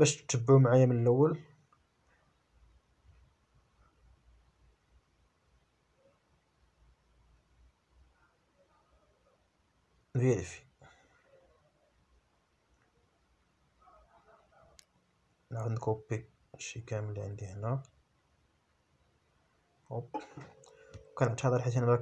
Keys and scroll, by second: 1.3 shift+p, 2.0 Return, 15.3 a, 16.2 Return, 17.5 Up, 19.4 ctrl+z.